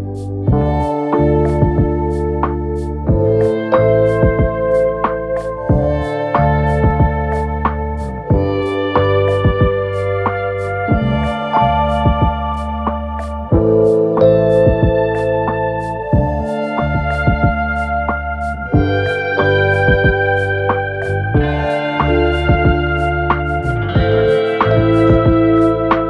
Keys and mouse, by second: 1.8 r, 5.2-7.8 drag, 6.5 s, 7.8 middle click, 8.4-10.1 drag, 9.4 s, 10.1-11.4 middle drag, 10.3 s, 11.4-15.0 drag, 14.4 s, 15.0-20.0 middle drag, 16.6 s, 17.5 s, 20.0-23.9 drag, 20.9 s, 21.8 s, 23.9-26.0 middle drag, 24.4 s.